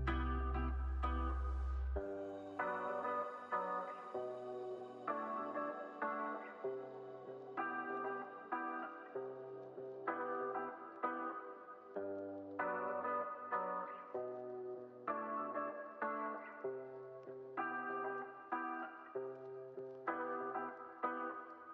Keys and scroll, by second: 1.4 super+c, 2.0 super+v, 2.8 super+v, 3.3 super+s, 6.2 alt+[, 8.8 alt+], 9.2 super+s, 12.2 u, 15.7 u, 17.8 u, 19.5 x.